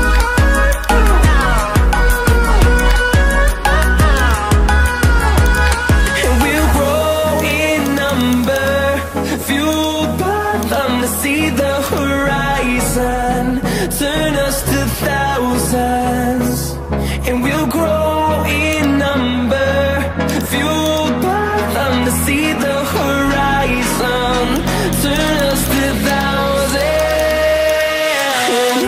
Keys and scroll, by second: 13.9 ctrl+alt+z, 14.6 ctrl+alt+z.